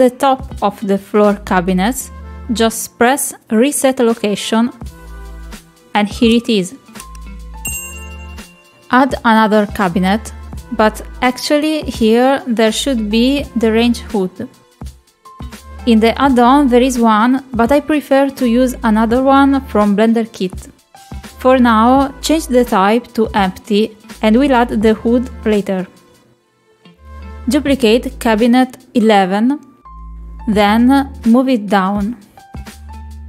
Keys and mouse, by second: 0.4 shift+middle click, 1.8 shift+middle click, 2.8 shift+middle click, 6.4 middle click, 7.0 shift+middle click, 7.8 middle click, 8.7 middle click, 9.1 click, 10.3 click, 17.7 click, 20.4-23.0 drag, 24.3-26.5 drag, 28.7 click.